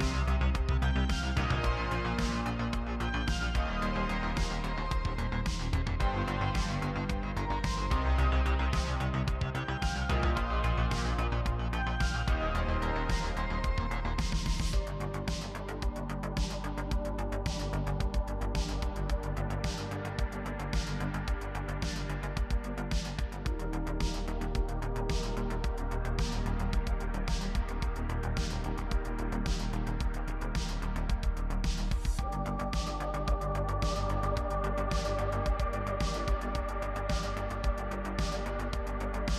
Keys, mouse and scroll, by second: 0.8 scroll down 2, 1.0 alt+click, 1.1-6.1 typing, 1.2 scroll up 1, 1.6 middle click, 1.6 scroll down 1, 1.7 middle click, 1.7 scroll up 2, 1.8 shift+middle click, 1.8 ctrl+r, 2.1 scroll down 4, 2.3 Tab, 2.4 middle click, 2.7 alt+a, 2.7 shift+middle click, 3.0 middle click, 3.0 Tab, 3.1-3.4 scroll up 2, 3.5 scroll down 1, 3.6 middle click, 3.6-4.3 scroll up 3, 3.9 middle click, 4.0 click, 4.6 scroll down 3, 4.6 middle click, 4.7 click, 4.9 middle click, 5.2 scroll up 1, 5.6 scroll down 1, 5.7 middle click, 5.8 scroll up 1, 6.0 middle click, 6.0 scroll down 1, 6.1 middle click, 6.3 middle click, 6.4 scroll up 1, 6.5 middle click, 6.6 ctrl+r, 7.2-10.2 typing, 7.3 middle click, 7.3 scroll up 1, 7.6 middle click, 7.7 scroll down 1, 7.9 middle click, 8.1 middle click, 8.3 middle click, 8.4 scroll up 1, 8.7 middle click, 8.7 click, 9.0 middle click, 9.0 scroll down 1, 9.2 middle click, 9.3 middle click, 9.5 click, 9.5 middle click, 9.7 click, 9.8 middle click, 9.8 Tab, 9.9 middle click, 9.9 scroll down 5, 9.9 middle click, 10.0 middle click, 10.1 Tab, 10.1-10.5 scroll up 4, 10.3 shift+middle click, 10.5 click, 11.3 scroll down 5, 11.3 middle click, 11.4 ctrl+r, 11.6-15.1 typing, 11.7 click, 12.1 middle click, 12.7 middle click, 12.7-13.0 scroll up 2, 13.0 alt+click, 13.0 middle click, 13.2 middle click, 13.3 Tab, 13.3 scroll down 2, 13.4 middle click, 13.6 scroll up 1, 13.7 Tab, 13.7 middle click, 13.7 shift+middle click, 13.9 click, 14.0 click, 14.1 scroll up 2, 14.3 click, 14.4 middle click, 14.6 click, 14.8 middle click, 14.9 Tab, 15.1 scroll up 1, 15.8 shift+middle click, 16.0 click, 16.6 scroll down 3, 16.6 middle click, 16.9-22.0 typing, 16.9 shift+middle click, 16.9-17.3 scroll up 3, 17.2 shift+middle click, 17.4 middle click, 17.9 shift+middle click, 18.1 middle click, 18.2 scroll up 1, 18.7 shift+middle click, 18.7 scroll down 4, 19.1 middle click, 19.2 scroll up 1, 19.4 middle click, 19.7 click, 19.9-20.5 scroll up 1, 20.5 alt+click, 20.6 scroll down 3, 20.6 shift+middle click, 21.0 middle click, 21.0-21.8 scroll up 3, 21.6 shift+middle click, 21.8 scroll down 2, 21.9 shift+click, 22.6 middle click, 22.8 click, 23.0 middle click, 23.0 ctrl+r, 23.4 shift+click, 23.4 middle click, 23.6 ctrl+r, 23.6 middle click, 23.7 click, 23.8-26.4 typing, 23.8 middle click, 24.0 Tab, 24.0 middle click, 24.2 scroll up 1, 24.2 middle click, 24.4 click, 24.4 middle click, 24.4-24.8 scroll down 5, 24.5 click, 24.7 middle click, 24.8 Tab, 24.8 middle click, 25.0 Tab, 25.1 shift+middle click, 25.2 scroll up 1, 25.2 middle click, 25.3 click, 25.4 middle click, 25.5 middle click, 25.6 middle click, 25.8 middle click, 25.9 ctrl+r, 26.0 middle click, 26.1 middle click, 26.5 middle click, 26.6-26.9 scroll down 1, 26.9 middle click, 27.1 scroll up 3, 27.2 scroll down 1, 27.2 shift+middle click, 27.4 click, 27.5 scroll up 2, 27.6 shift+click, 27.7-29.8 typing, 28.0 middle click, 28.3 scroll up 1, 28.3 middle click, 28.4 click, 28.4 middle click, 28.6 shift+click, 28.8-29.3 scroll down 10, 28.8 middle click, 28.9 shift+middle click, 29.2 Tab, 29.3 middle click, 29.5 scroll up 3, 29.6 middle click, 29.6 alt+a, 29.6 middle click, 29.7 middle click, 29.9 Tab, 29.9 shift+middle click, 30.8 scroll down 8, 30.9 middle click, 31.0 Tab, 31.0-31.3 scroll up 3, 31.0 middle click, 31.3 z, 31.4 g, 31.5 middle click, 31.6 Tab, 31.6 middle click, 31.7 Tab, 31.8 middle click, 31.8 ctrl+r, 32.1 scroll down 2, 32.1 middle click, 32.2 ctrl+z, 32.2 middle click, 32.3 scroll up 4, 32.4 middle click, 32.5 middle click, 33.3 middle click, 33.3 ctrl+r, 33.4 click, 33.4 middle click, 33.6 ctrl+click, 33.8 middle click, 33.8 z, 33.9 middle click, 34.0 scroll down 1, 34.1 scroll up 2, 34.1 ctrl+r, 34.5 scroll down 1, 34.5 middle click, 34.6 Tab, 34.6 scroll up 1, 34.8 middle click, 34.8 click, 35.0 middle click, 35.1 click, 35.4 middle click, 35.4 click, 36.1 z, 36.1-36.4 scroll down 4, 36.4 z, 36.5 middle click, 36.6-37.5 scroll up 4, 36.7 click, 36.9 middle click, 37.1 middle click, 37.4 KP_3, 37.7 middle click, 38.2 click, 38.4 shift+click, 38.9 shift+click, 38.9 scroll down 1, 38.9 middle click, 39.0 s, 39.2 z, 39.3 scroll up 1, 39.3 ctrl+r.